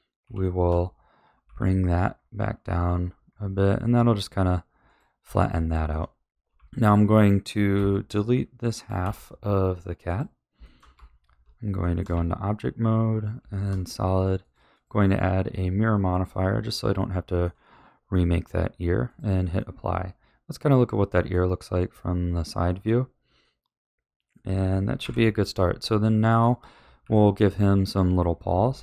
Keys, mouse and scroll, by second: 0.2 g, 5.2 a, 5.6-6.5 shift+middle drag, 6.5 z, 7.7 b, 9.0 x, 10.6-10.9 shift+middle drag, 10.9 Tab, 11.8-12.1 shift+middle drag, 12.1 z, 13.5 shift+middle click, 14.4 click, 14.7-16.9 drag, 16.9-19.0 shift+middle drag, 19.0 click, 19.5-25.0 middle drag, 25.0 KP_1, 26.0-27.0 shift+middle drag, 27.0 a, 27.5-28.8 middle drag.